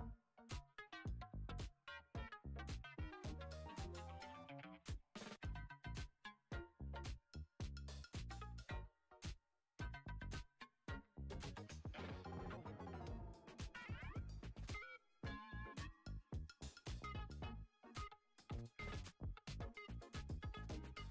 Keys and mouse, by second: 0.6 alt+z, 1.0-2.1 shift+middle drag, 2.1 click, 3.2 shift+click, 4.2 shift+click, 5.1-5.5 shift+drag, 6.4 shift+click, 7.0 shift+click, 8.2 KP_3, 9.8 shift+click, 10.8 shift+drag, 11.6 shift+click, 12.5 KP_1, 13.0 alt+z, 13.7 g, 16.4 Tab, 18.7-19.2 drag.